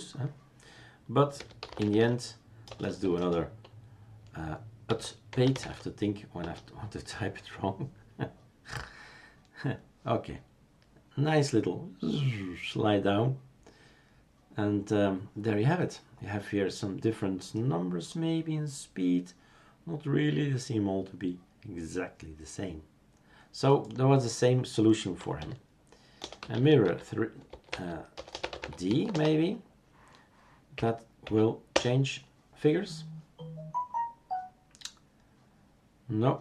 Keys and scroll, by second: 1.1-3.0 typing, 4.1-6.4 typing, 6.4 Return, 7.4 typing, 25.4 typing, 28.8 typing, 29.1 Return, 30.7 Up, 31.2 Up, 31.7 Return.